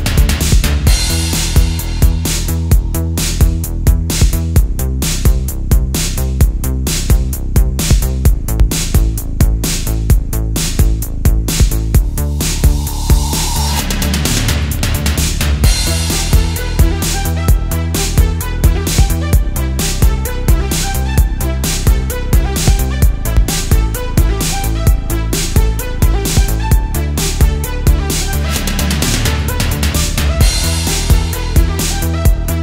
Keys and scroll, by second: 0.2 super+z, 0.7 super+z, 2.4 space, 3.6 space, 3.8 space, 4.7 super+space, 8.0 space, 8.8 super+z, 12.1 space, 13.3 space, 13.6 space, 14.0 space, 15.3 space, 15.7 space, 16.3 alt+super+space, 17.3 super+space, 17.6 super+space, 18.5 space, 19.1 super+z, 19.6 space, 20.2 space, 20.9 space, 22.8 space, 23.1 space, 24.4 space, 25.0 space, 25.5 super+space, 26.2 super+space, 26.6 super+space, 27.5 alt+super+space, 28.5 space, 29.1 super+space, 30.0 super+z, 30.5 super+z, 31.1 space, 31.5 space, 32.2 space.